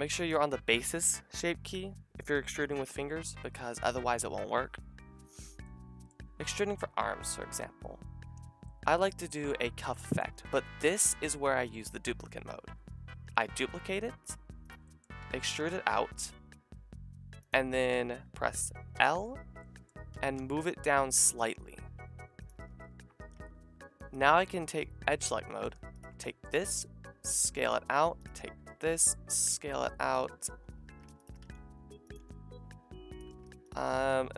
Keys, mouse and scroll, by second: 0.2-8.5 middle drag, 8.9 middle click, 9.3-12.7 drag, 13.3 shift+d, 13.5-15.4 drag, 15.2 e, 18.9 l, 20.1 g, 22.6-24.1 middle drag, 23.2 a, 24.1-27.4 drag, 26.6 s, 27.4 middle click, 27.5 a, 28.5 s, 30.8 a, 31.4 s, 32.7 s, 33.3 a, 34.0 s.